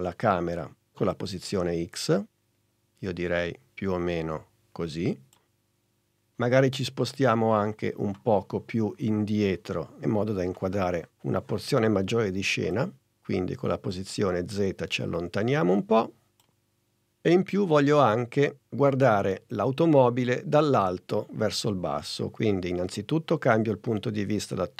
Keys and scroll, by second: 5.9 super+z.